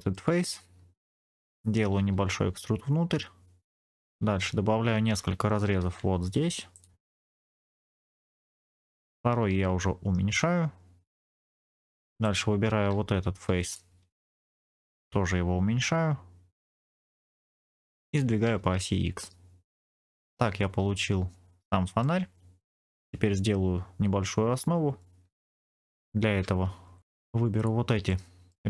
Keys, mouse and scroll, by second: 0.3-1.4 scroll up 1, 1.9 e, 3.7 middle click, 3.7 click, 4.4-5.0 scroll down 1, 5.7 ctrl+r, 7.7 click, 8.2 ctrl+r, 8.8 click, 9.4 s, 11.0 click, 11.5 middle click, 12.1 click, 13.4 3, 13.5 click, 14.0 middle click, 15.0 s, 16.6 click, 18.0 g, 18.5 x, 19.8-22.0 drag, 19.8 middle click, 19.8-20.5 scroll down 2, 25.1 Tab, 25.6 scroll up 2, 26.8 Tab, 26.8 scroll up 1, 27.0 2, 27.4 click, 28.0 middle click.